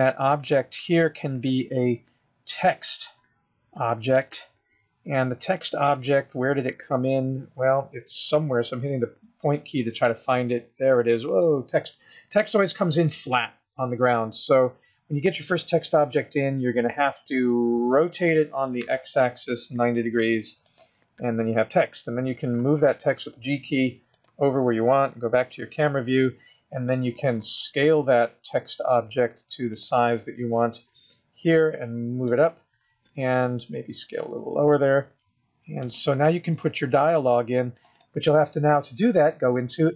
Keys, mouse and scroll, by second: 0.6 click, 5.2-6.2 scroll down 4, 6.2-7.2 scroll up 4, 7.2-7.7 scroll down 3, 8.9 KP_Decimal, 10.3 middle click, 12.9 scroll down 3, 18.3 r, 22.8 g, 25.3 KP_0, 26.3-27.6 scroll up 1, 27.6 s, 31.1 g, 34.5 s, 38.0 click, 38.2 click.